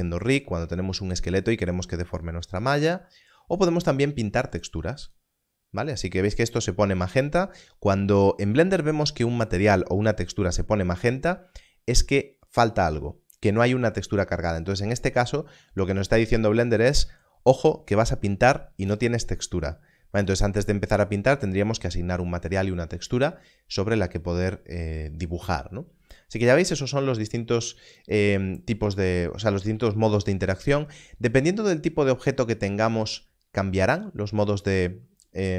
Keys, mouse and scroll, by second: 5.0 click, 26.3 click.